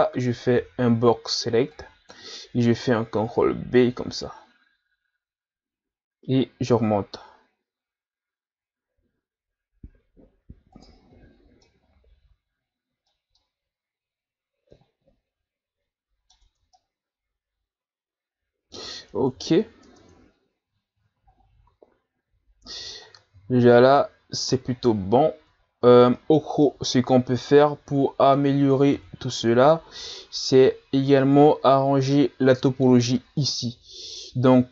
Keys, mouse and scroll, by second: 0.6 b, 3.2 ctrl+b, 11.1 z, 11.6-19.3 middle drag, 19.3 KP_3, 19.8 Tab, 20.2-21.1 scroll up 4, 21.4-22.2 scroll up 4, 22.2 scroll down 1, 22.7-23.1 scroll up 1, 23.1-23.5 scroll down 2, 23.5-24.8 scroll up 5, 24.8 scroll up 1, 25.7-26.4 scroll up 2, 26.4 scroll down 2, 26.6-28.9 middle drag, 28.9 KP_3, 29.7-30.4 scroll up 3, 30.9-31.6 scroll down 4.